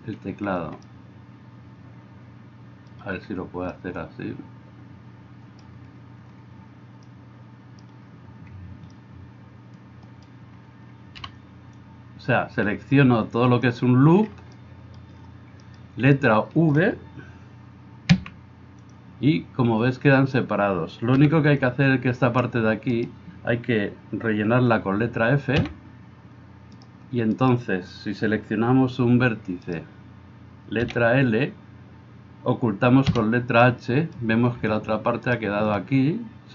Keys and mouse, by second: 11.2 b, 18.2 v, 18.9-33.1 middle drag, 25.6 f, 27.4-28.6 right drag, 29.7-33.1 right drag, 33.1 h, 35.2 alt+click.